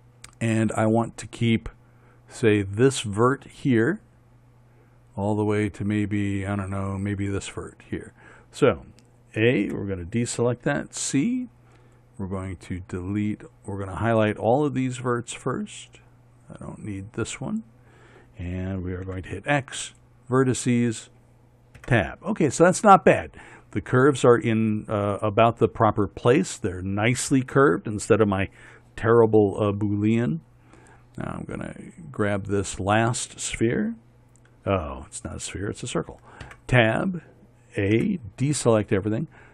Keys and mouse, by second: 3.8-6.5 right drag, 10.1 a, 11.2 c, 19.6 click, 19.6 x, 22.3 Tab, 32.6-37.0 drag, 37.0 Tab, 38.5 a.